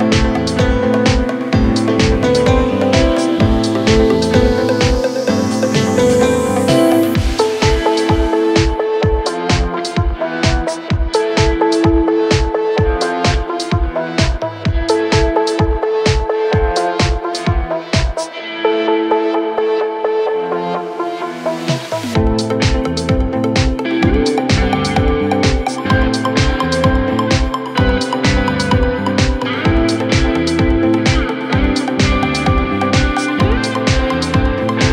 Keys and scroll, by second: 20.5 ctrl+z.